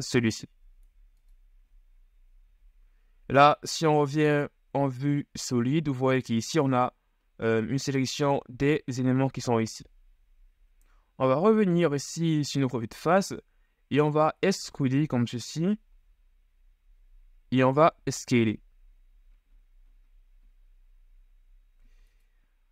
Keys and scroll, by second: 2.6 z, 11.4 KP_1, 16.0 e, 18.2 s.